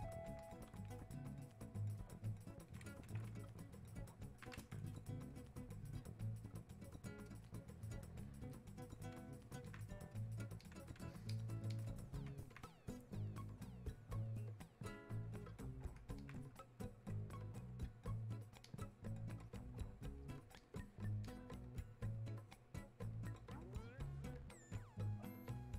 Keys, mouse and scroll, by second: 3.7-5.0 alt+drag, 5.0-6.5 drag, 6.5 click, 7.5 click, 8.6 click, 9.7 alt+click, 10.7 click, 11.3 alt+click, 13.5-16.2 drag, 17.1-25.7 drag.